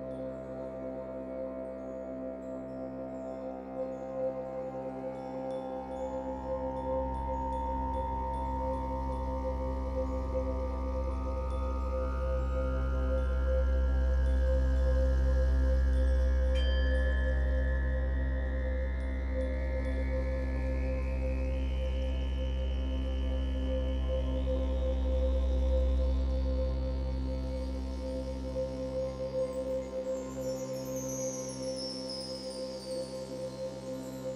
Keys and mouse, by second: 3.8 space, 5.2 click, 6.8 click, 8.0-9.0 drag, 9.6 click, 11.5 click, 12.8 ctrl+s, 14.4 alt+click, 15.4 alt+click, 16.8 click, 17.9 click, 19.6-23.3 ctrl+alt+drag, 23.8 click, 27.5-28.3 drag, 30.0 click, 31.6-34.3 drag.